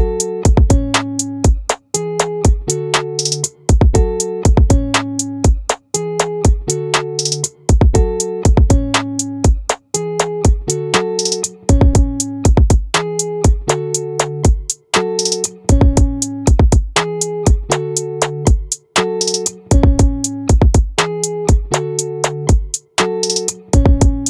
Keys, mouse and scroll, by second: 2.9 middle click, 4.0 z, 7.6-9.4 right drag, 11.6 right click, 13.4-15.0 drag, 19.6 middle click, 21.2-23.9 middle drag.